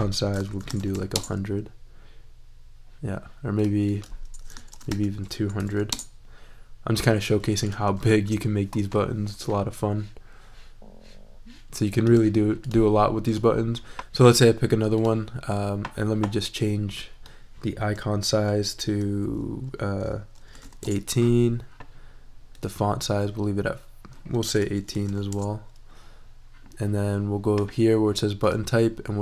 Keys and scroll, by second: 0.5 super+a, 0.6 super+i, 0.8 0, 1.1 Return, 4.6 super+a, 4.9 super+2, 5.5 0, 5.9 Return, 8.0 shift+super+e, 20.3-21.1 typing, 24.4-25.5 typing.